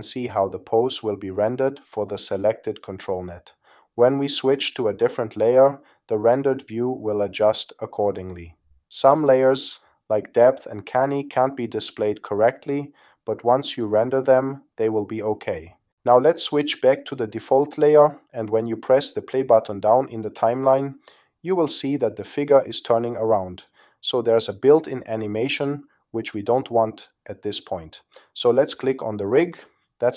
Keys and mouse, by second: 3.4-6.3 middle drag, 9.7 Down, 11.3-12.5 middle drag, 13.6-16.9 drag, 18.6 click, 21.1 space, 23.5 space, 26.1 click.